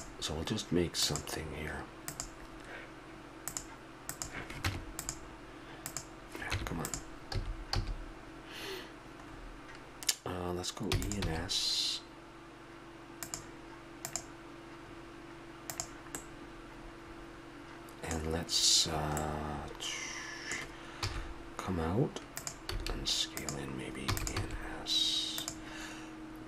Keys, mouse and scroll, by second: 1.0-7.4 drag, 4.7 Tab, 6.5 Tab, 7.3 a, 7.8 a, 10.9 e, 11.2 s, 16.2 middle click, 16.5-18.0 middle drag, 19.2-20.3 middle drag, 21.0 e, 22.7 s, 24.1 e, 24.3 s.